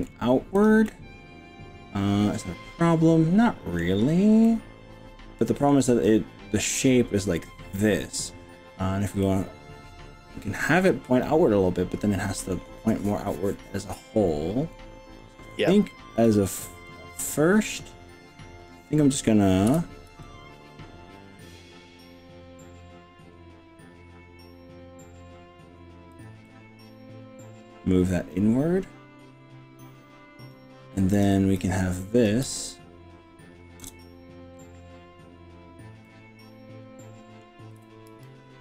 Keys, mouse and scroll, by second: 0.7 click, 0.9-3.8 middle drag, 4.4-5.7 middle drag, 9.2-12.6 middle drag, 14.7-15.3 middle drag, 16.2 shift+drag, 16.9 shift+drag, 17.2-18.6 middle drag, 18.6 middle click, 19.7 KP_7, 20.1 g, 22.5-22.9 scroll up 3, 23.3-24.3 scroll down 4, 24.1-24.9 scroll up 3, 26.1 drag, 26.5-30.5 middle drag, 31.2 click, 31.6 click, 33.9 ctrl+KP_Add, 36.0-37.5 middle drag, 37.8 g, 38.1 r.